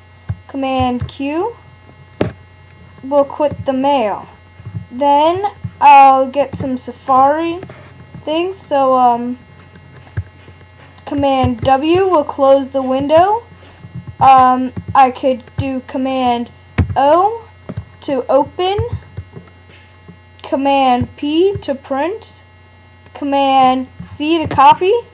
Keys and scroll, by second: 0.8 super+q, 11.4 super+w, 16.8 super+o, 18.8 super+w.